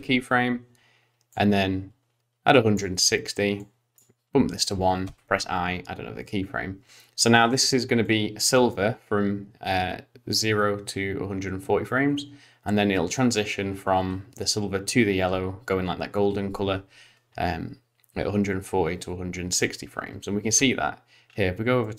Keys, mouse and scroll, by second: 1.3 click, 3.6 click, 5.0 i, 8.0 click, 20.1 z, 21.2-21.8 scroll up 4, 21.8 middle click.